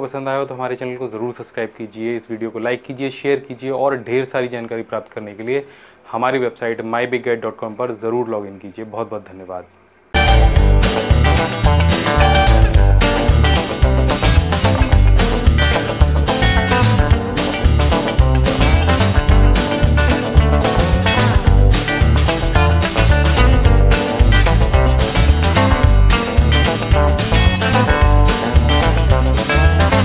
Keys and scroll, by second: 4.4-5.4 typing.